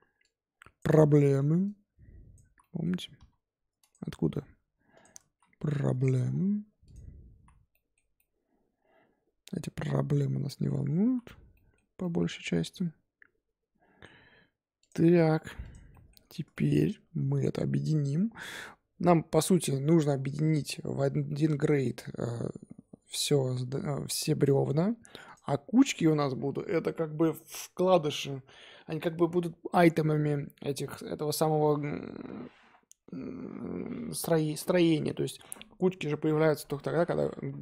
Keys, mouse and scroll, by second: 0.2 click, 0.8 middle click, 1.6 click, 2.4 z, 2.6 middle click, 3.1 s, 4.2 g, 5.2 s, 6.1 Tab, 6.3-6.8 scroll down 3, 6.8 click, 7.3 z, 7.7-10.8 middle drag, 10.8 scroll down 4, 11.0 z, 11.5-14.8 middle drag, 14.8-15.9 drag, 15.9-16.2 middle drag, 16.2-16.5 scroll up 3, 16.5-20.0 shift+middle drag, 20.7-21.2 scroll down 4, 21.2-23.4 middle drag, 23.4-25.2 scroll up 3, 25.2 click.